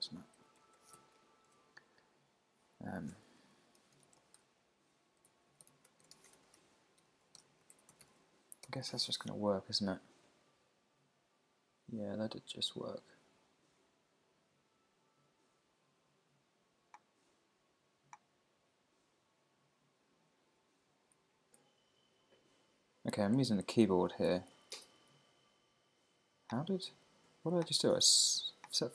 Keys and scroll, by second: 0.4 Left, 0.9 super+s, 1.2 Down, 1.5 Tab, 6.0 shift+t, 6.3 shift+9, 7.7 super+Right, 8.0 super+s, 8.1 super+Tab, 8.6 super+r, 20.5 Right, 23.8 Down, 24.3 Up, 24.8 Down.